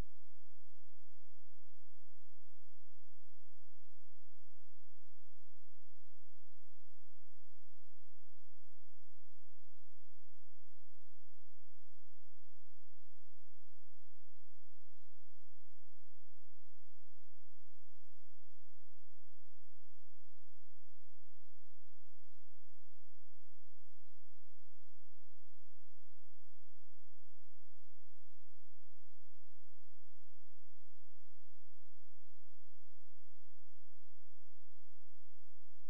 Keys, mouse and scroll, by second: 0.0-1.9 scroll up 1, 2.1 click, 3.4 ctrl+z, 3.9-4.4 scroll down 1, 4.4 click, 6.5 right click, 7.1 click, 8.2-8.6 scroll up 1, 8.6-9.2 scroll down 1, 9.2 click, 15.7-17.5 scroll up 1, 17.5 click, 18.2 scroll down 1, 18.7 scroll up 1, 19.3 click, 21.3 h, 22.4 click, 25.7 scroll down 1, 25.9-26.5 scroll up 1, 27.0-27.5 scroll down 1, 27.5 click, 28.5 F4, 29.4 z, 29.9 click, 31.7 space, 32.1 click.